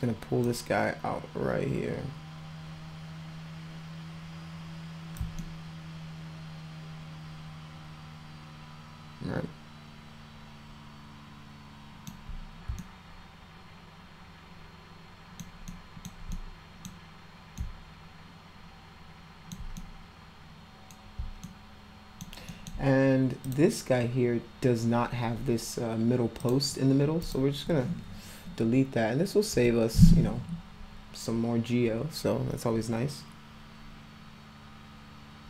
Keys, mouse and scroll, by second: 0.4-5.2 drag, 5.4-12.0 alt+middle drag, 12.7-15.4 alt+middle drag, 15.7 alt+middle click, 16.3 middle click, 17.5-19.5 alt+middle drag, 19.7-20.9 middle drag, 21.4 alt+middle click, 22.5 alt+middle click, 23.4 click, 26.4 click, 27.2 click, 29.5 Delete.